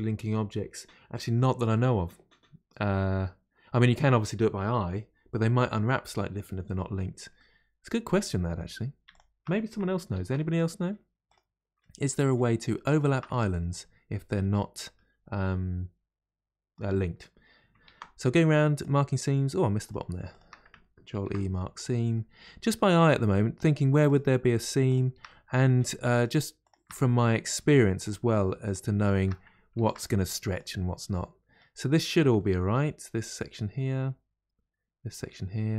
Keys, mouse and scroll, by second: 7.3-9.1 middle drag, 9.1 alt+click, 10.1 ctrl+e, 11.3 ctrl+e, 11.8-12.9 middle drag, 12.9 alt+click, 13.3-16.3 middle drag, 17.9 ctrl+e, 19.9 click, 20.3 shift+click, 21.1 ctrl+e, 21.8 ctrl+e, 22.1-24.1 middle drag, 24.1 click, 24.9 shift+click, 25.3 middle click, 26.1 shift+click, 26.6 shift+click, 26.9-28.0 middle drag, 28.0 shift+click, 28.7 shift+click, 29.7 ctrl+e, 31.1-35.7 middle drag.